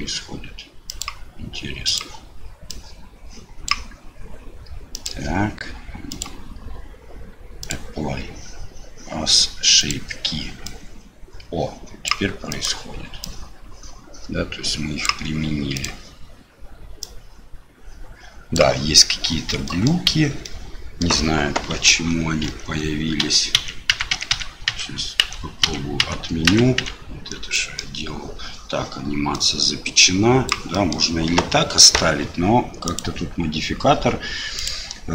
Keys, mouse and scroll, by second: 0.9 click, 1.9 click, 2.7-3.7 drag, 6.2-7.7 drag, 9.8 click, 10.6-12.0 drag, 12.5 click, 13.2-15.0 drag, 15.7 click, 17.1-18.5 drag, 19.6 middle click, 20.4 middle click, 21.9 ctrl+z, 22.4 ctrl+z, 23.2 ctrl+z, 23.5 ctrl+z, 23.9 ctrl+z, 24.2 ctrl+z, 24.4 ctrl+z, 24.7 ctrl+z, 25.2 ctrl+z, 25.7 ctrl+z, 26.0 ctrl+z, 26.5 ctrl+z, 26.9 ctrl+z, 27.5 middle click, 29.3-30.5 drag, 30.7 middle click, 34.6-35.1 drag.